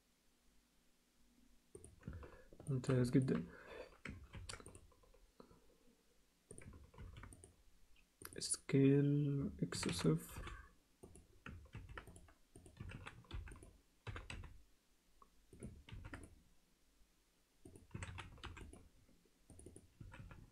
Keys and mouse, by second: 2.7 alt+shift+middle click, 3.1 ctrl+alt+middle click, 4.3 ctrl+r, 7.0 ctrl+r, 9.7 s, 11.7 ctrl+r, 12.8 s, 14.1 g, 15.9 ctrl+r, 17.9 s, 19.5 click, 20.0 s.